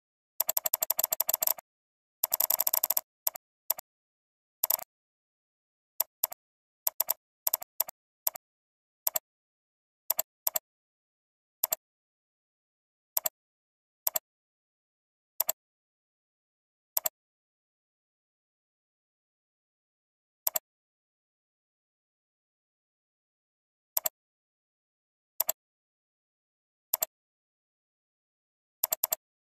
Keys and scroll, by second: 28.1 alt+space.